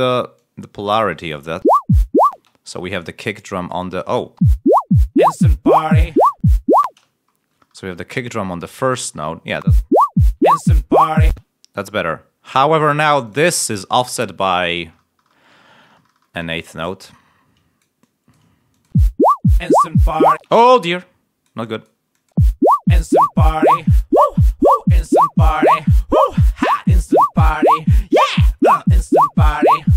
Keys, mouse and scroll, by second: 1.5 l, 2.2 space, 2.6 click, 3.6 click, 4.3 l, 5.9 click, 6.8 space, 7.2 ctrl+scroll up 1, 8.0 scroll up 2, 9.2 scroll down 2, 9.6 space, 10.0 ctrl+scroll down 2, 11.2 space, 11.4-11.9 scroll down 3, 13.2 click, 14.6 ctrl+scroll up 2, 15.6 ctrl+scroll up 2, 16.9-18.4 drag, 18.8 space, 20.0 ctrl+scroll down 1, 20.8 ctrl+space, 22.0 click, 22.3 space, 23.5 ctrl+scroll down 2, 25.6 ctrl+scroll down 2.